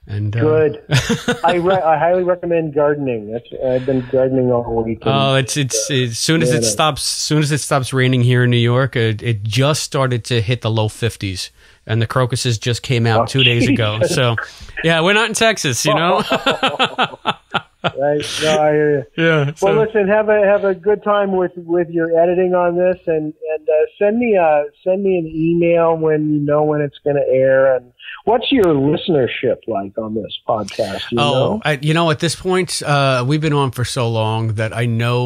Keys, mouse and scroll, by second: 3.5-4.7 drag, 5.7 click, 7.2-9.4 drag, 10.3-11.4 drag, 13.0-25.0 drag, 27.0-33.5 drag, 34.7-35.2 drag.